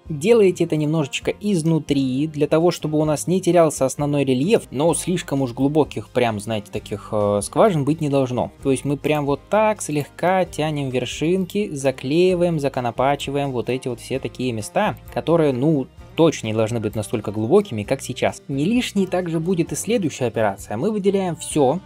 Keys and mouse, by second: 7.5 g, 12.1 g, 13.5 click, 13.6-21.8 middle drag, 14.2 g, 15.4 g, 18.1 g, 21.3 a.